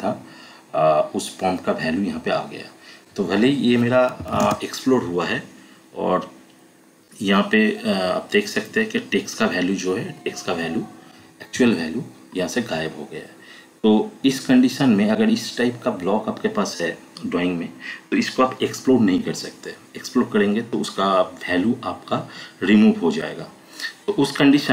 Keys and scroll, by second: 3.9-4.8 typing, 11.6 Escape.